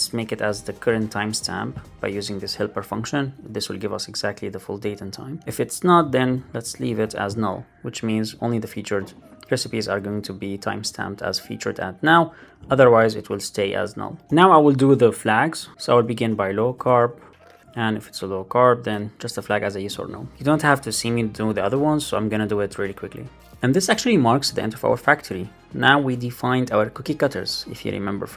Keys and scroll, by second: 1.8 Left, 2.7 alt+shift+Left, 3.3 shift+super+Right, 3.4 shift+Left, 3.8 Right, 4.5 Right, 6.8 alt+super+l, 6.9 super+s, 13.1 super+Right, 14.2 super+d, 17.7 alt+Right, 18.4 alt+Right, 20.1 shift+super+Right, 20.3 shift+Left, 23.4 super+c.